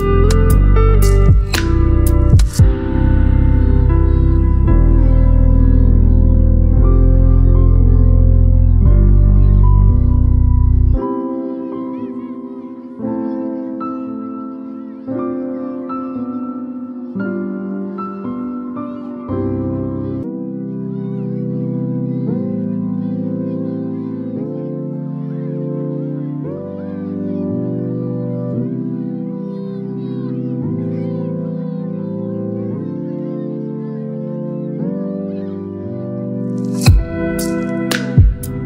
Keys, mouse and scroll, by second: 0.2 v, 3.2-4.9 shift+drag, 5.0-9.1 shift+drag, 12.1-15.9 shift+drag, 23.0 Delete, 24.2 ctrl+d, 25.7 v, 26.9-30.4 shift+drag, 32.8 ctrl+g, 35.0 click, 37.9 shift+click.